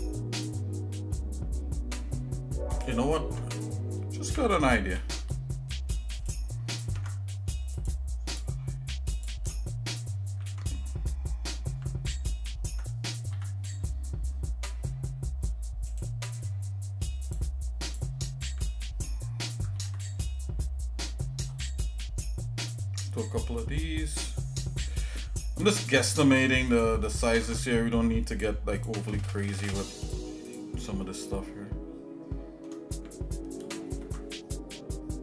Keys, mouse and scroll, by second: 4.9 ctrl+r, 6.9 ctrl+Tab, 8.3 click, 9.2 shift+click, 13.5 j, 15.9-17.5 right drag, 17.9 click, 19.7 ctrl+b, 27.5 ctrl+Tab, 28.8 click, 29.6 shift+click, 30.1 shift+click, 31.1-32.7 shift+middle drag, 33.9 ctrl+b.